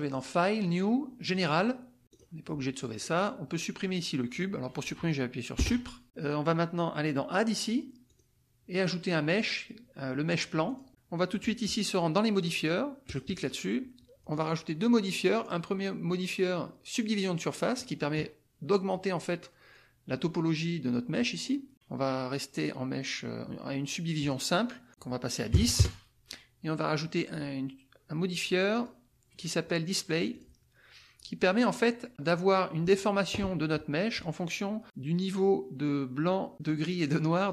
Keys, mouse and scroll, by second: 0.0 click, 1.3 click, 2.0 click, 5.6 Delete, 8.1 click, 10.6 click, 13.0 click, 17.2 click, 24.2 click, 24.9 click, 25.5 KP_1, 25.6 KP_0, 25.7 KP_Enter, 28.7 click, 30.3 click.